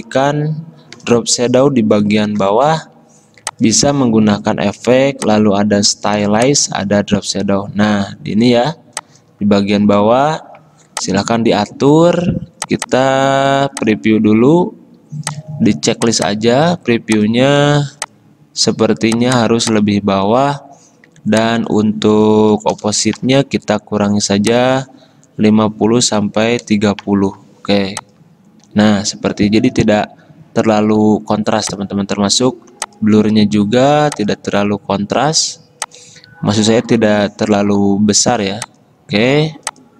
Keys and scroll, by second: 22.5-23.4 typing, 26.3-27.1 typing.